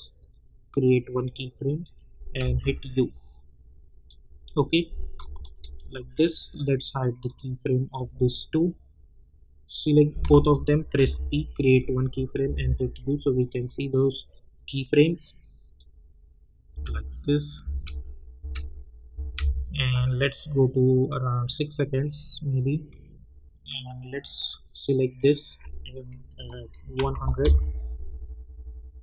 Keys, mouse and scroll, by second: 2.4 u, 4.0 click, 5.4 shift+click, 10.3 shift+click, 11.0 p, 11.7 click, 12.4 u, 15.7 click, 16.7 space, 20.3-22.5 drag, 27.4 Return.